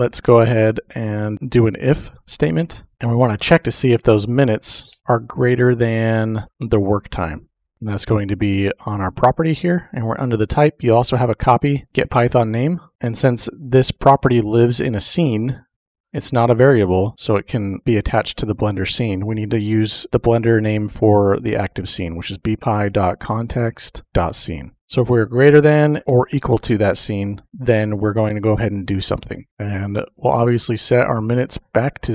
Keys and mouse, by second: 1.1 Return, 2.3-2.8 typing, 3.9 ctrl+v, 4.0-5.3 typing, 6.5 space, 8.3 click, 12.9 ctrl+v, 12.9 typing, 17.7 click, 20.1 typing, 22.9-24.1 typing, 26.0 Menu, 26.0 typing, 27.7 click, 28.9 Return, 29.5 Tab, 29.5 typing, 31.9 click.